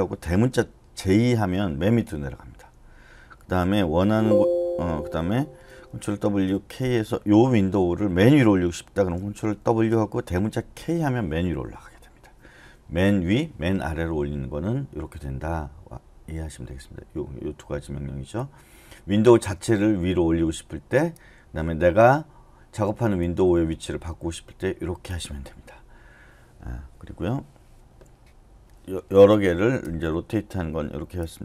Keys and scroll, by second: 1.1 j, 4.0 k, 6.2 ctrl+w, 6.8 k, 9.6 ctrl+w, 10.7 shift+k.